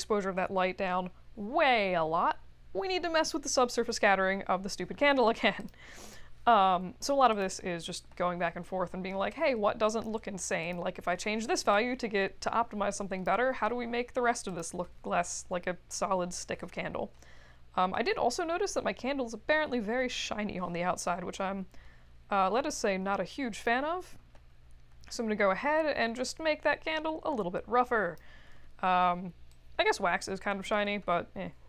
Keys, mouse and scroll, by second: 7.3 click, 9.3 click, 10.6 click, 11.7-13.2 drag, 14.4 click, 17.1 middle click, 17.6 middle click, 21.1 middle click, 21.2 middle click, 21.3-21.7 scroll up 2, 23.5 click, 26.5 click, 29.6 click.